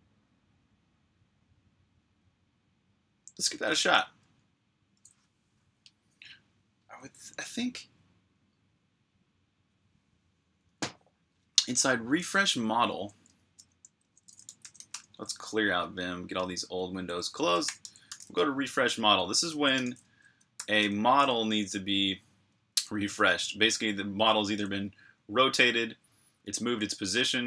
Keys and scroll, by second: 13.2 Escape, 14.1-15.1 typing, 17.3-20.4 typing, 20.4 Tab, 20.6 Return, 22.2-22.9 typing, 24.2 typing, 26.3-27.3 typing.